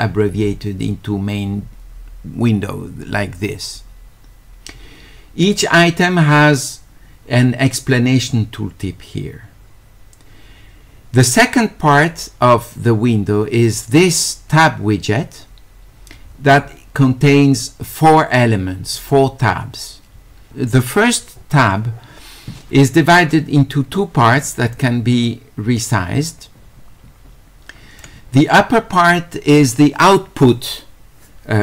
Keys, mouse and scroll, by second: 24.7-28.0 drag.